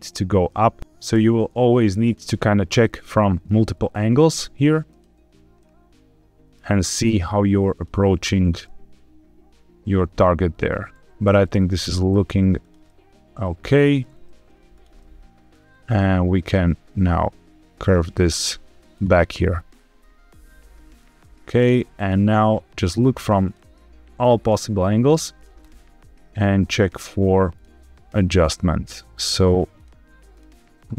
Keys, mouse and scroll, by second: 0.7 e, 1.0 ctrl+z, 2.0 click, 2.2-3.4 middle drag, 3.5 e, 4.8 click, 5.5 middle click, 6.7 e, 7.6 click, 7.8 e, 8.3 click, 8.6-10.9 middle drag, 10.9 ctrl+z, 10.9 click, 10.9 e, 11.7 click, 12.0 e, 12.5 click, 12.8-13.9 middle drag, 14.0 g, 14.6 click, 14.9 middle click, 15.5 e, 16.3 click, 16.5 e, 17.8 click, 18.0 e, 18.8 click, 19.1-20.9 middle drag, 21.5 click, 21.7 middle click, 22.2 g, 23.4 click, 24.1 click, 24.3 g, 25.3 click, 25.5-26.9 middle drag, 27.4 click, 27.8 g, 29.7 click, 30.2 click, 30.8 g.